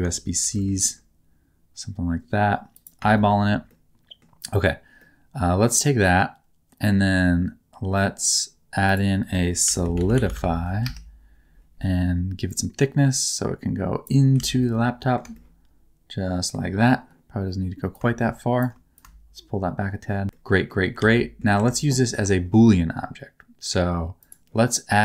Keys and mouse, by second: 0.4 shift+d, 0.5 middle click, 2.7 click, 3.1 shift+middle click, 3.7 middle click, 5.0 middle click, 9.0-10.8 drag, 12.6-14.0 drag, 14.4 alt+z, 14.6 middle click, 15.3-16.5 middle drag, 17.9 click, 18.9-20.2 shift+drag, 20.4 middle click, 21.0 alt+z, 21.1 middle click, 21.5 Tab.